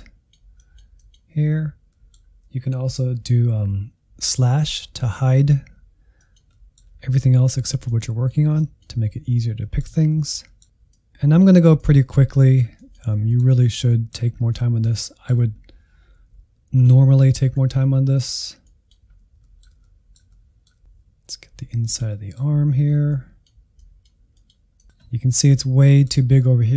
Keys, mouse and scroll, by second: 1.9-3.7 middle drag, 3.7 /, 6.2 click, 6.5 middle click, 6.9-7.9 scroll up 2, 7.9-9.2 drag, 9.2 /, 9.5 middle click, 9.9 scroll up 1, 10.1-11.2 middle drag, 11.2 click, 12.0 middle click, 12.2-13.2 scroll up 4, 12.3 middle click, 12.6 shift+middle click, 13.2 f, 13.7 click, 14.3 scroll down 3, 14.4 middle click, 15.3 click, 15.6 middle click, 15.9 click, 16.2-17.3 shift+middle drag, 17.3 scroll up 1, 17.4 shift+middle click, 17.6 click, 18.2 middle click, 18.5 click, 18.9 middle click, 19.2 click, 19.3 shift+middle click, 20.1-20.6 scroll up 6, 20.2 middle click, 20.6 shift+middle click, 21.0 f, 21.3 middle click, 21.7-22.8 drag, 22.8 scroll down 2, 22.9 middle click, 23.3 click, 23.8 scroll down 2, 23.9-26.7 middle drag.